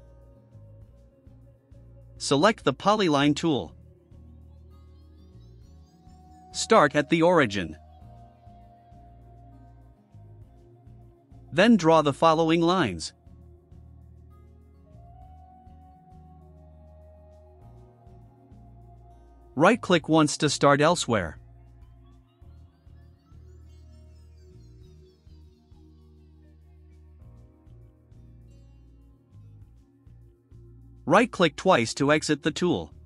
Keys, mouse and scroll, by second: 4.7 click, 6.8 click, 7.1 middle click, 7.1 scroll down 1, 7.5 right click, 8.7 scroll down 2, 9.9 right click, 11.8 click, 13.2 scroll up 2, 14.7 scroll up 1, 15.7 click, 16.8 click, 17.5 click, 17.7 scroll down 2, 19.7 click, 20.3 right click, 22.7 click, 25.3 click, 25.5 middle click, 25.5-26.3 scroll up 4, 25.7 middle click, 26.4 right click, 27.4 click, 29.0 click, 30.3 click, 30.8 scroll down 2, 31.1 right click, 32.4 right click, 32.9-33.0 scroll down 4.